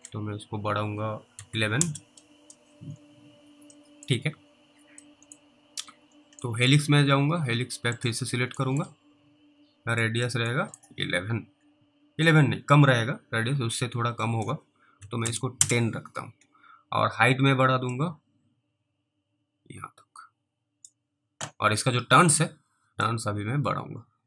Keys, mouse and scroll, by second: 1.4 typing, 1.8 Return, 2.9-3.7 scroll down 3, 4.0 middle click, 4.4-5.0 scroll up 1, 5.3 middle click, 6.0 scroll down 3, 6.7 middle click, 8.0 click, 8.9 middle click, 10.3 click, 10.8 middle click, 11.6 middle click, 14.1 click, 15.6 Return, 18.2 click, 23.3 click.